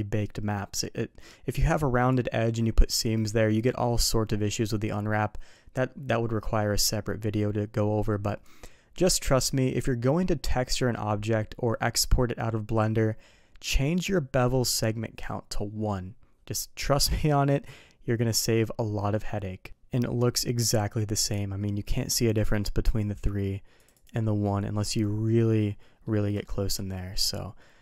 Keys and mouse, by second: 19.8-20.2 middle drag, 20.7 middle click, 22.1 click, 22.3 click, 23.7 click, 23.9 click, 24.8-25.5 middle drag, 26.0 middle click, 26.3 shift+middle click, 26.8 middle drag.